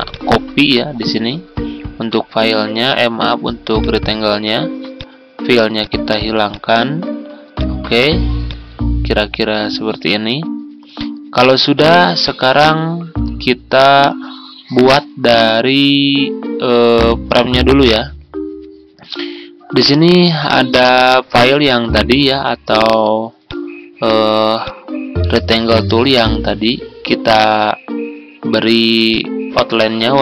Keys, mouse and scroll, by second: 15.1 Tab, 17.7-25.6 drag.